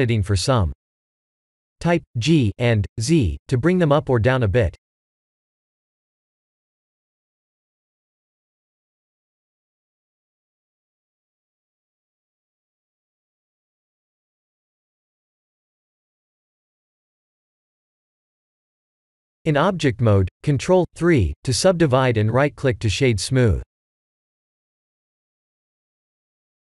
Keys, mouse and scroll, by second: 4.8 click, 6.0 click, 6.3 g, 8.2 click, 9.3 g, 11.2 click, 11.7 g, 13.1 click, 13.3 g, 14.7 click, 15.3 g, 16.3 Tab, 16.8-18.2 scroll down 3, 17.3-20.1 middle drag, 20.9 ctrl+3, 21.8-23.5 middle drag, 23.8-24.9 right drag, 25.2-26.5 scroll down 2, 26.5-26.7 middle drag.